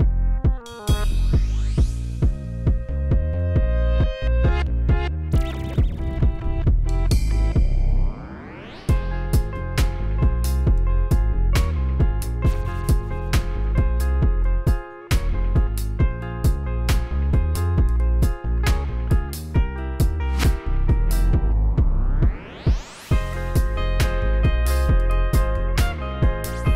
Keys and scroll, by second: 0.6 r, 0.7 y, 3.9 3, 4.0 Return, 16.5 r, 16.7 z, 17.4 Escape.